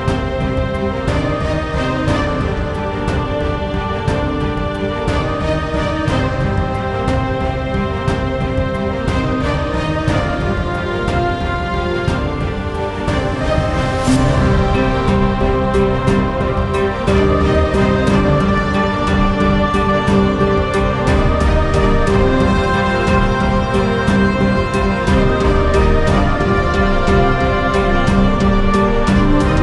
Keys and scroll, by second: 1.2-3.4 typing, 3.4 Return, 5.4 1, 6.2 ctrl+a, 6.5 1, 10.3-11.4 typing, 11.4 Return, 12.7-14.3 typing, 17.5-20.1 typing, 20.6 Down, 21.3 Down, 21.5 Down, 21.7 Down, 22.4 Return, 25.2-27.4 typing, 28.0 Return.